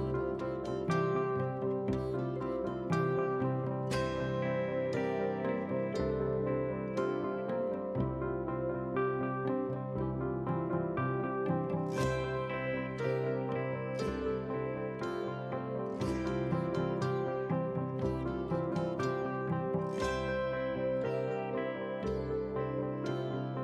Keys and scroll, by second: 13.2 ctrl+space.